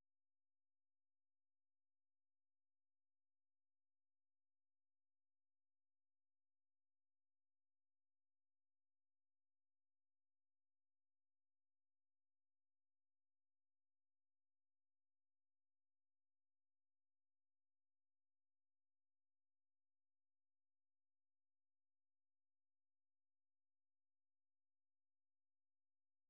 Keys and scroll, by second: 7.4 super+1, 9.3-10.1 typing, 16.8-18.1 typing, 19.1-21.0 typing, 22.7-23.7 typing, 23.8 Tab, 25.0 Return.